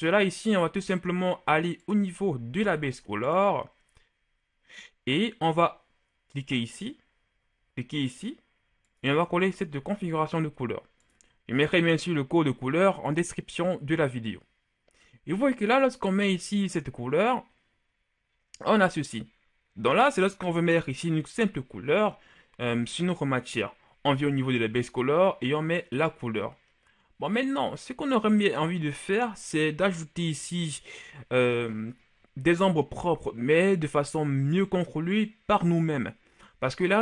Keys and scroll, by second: 2.5 ctrl+c, 9.7 ctrl+v.